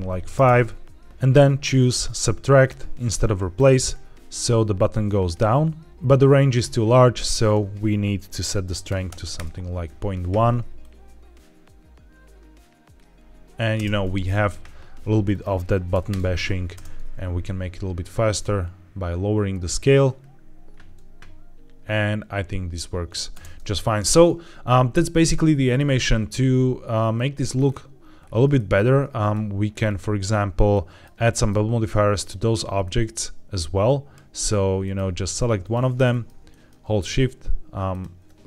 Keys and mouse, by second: 0.2 space, 1.5 drag, 2.5-3.6 drag, 4.8-5.9 drag, 7.3-9.3 drag, 10.7-12.9 drag, 12.9 space, 13.7 space, 15.3 click, 16.6 space, 23.2 space, 27.1-27.5 middle drag, 28.4 shift+middle drag, 29.1 click, 30.2 middle drag, 30.6-30.9 shift+middle drag, 31.2 middle click, 32.1 click, 32.7-34.3 middle drag, 34.7 shift+middle drag, 36.0 middle drag, 36.4 shift+middle drag, 37.8 shift+click.